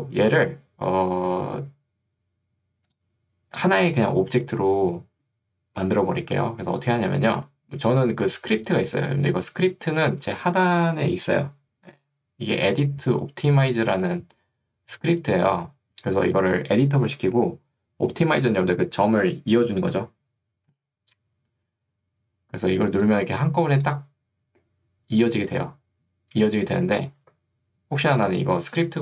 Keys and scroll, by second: 8.1 ctrl+2, 12.7 Escape, 27.3 ctrl+z.